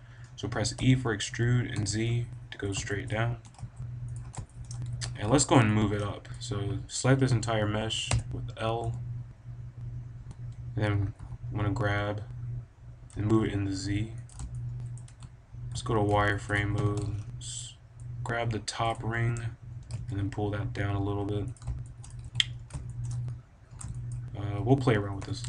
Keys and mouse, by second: 0.0-1.3 drag, 0.7 e, 2.7 click, 3.3 g, 4.8 a, 8.0 l, 8.7 KP_1, 10.2 g, 14.2 click, 14.8 middle click, 15.0 a, 15.6 z, 16.3-18.0 drag, 16.6 b, 18.8-20.5 drag, 19.7 right click, 19.7 g, 21.5-22.7 drag, 22.2 a, 25.2 KP_5.